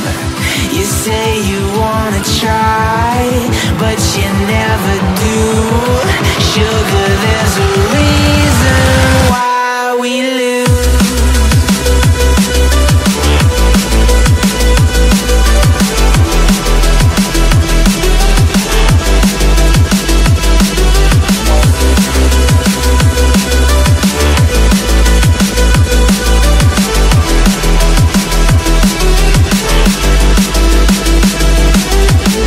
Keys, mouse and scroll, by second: 0.4 click, 0.7 z, 1.9 click, 2.8 b, 3.9-7.5 drag, 8.0 Tab, 9.6 click, 10.1 Tab, 10.6 click, 11.5 b, 12.9-15.0 drag, 16.1-16.9 scroll down 1, 17.0 KP_3, 18.1-18.9 scroll down 8, 18.9 shift+middle click, 19.4-19.9 scroll up 2, 19.9 Tab, 20.5 Tab, 21.6 KP_1, 22.3-23.6 scroll up 1, 23.6 Tab, 24.2 Tab, 24.8 a, 26.1-26.5 scroll up 1, 26.5 click, 27.6 click, 28.2 scroll down 1, 28.5 middle click, 29.3 Tab, 29.7 click.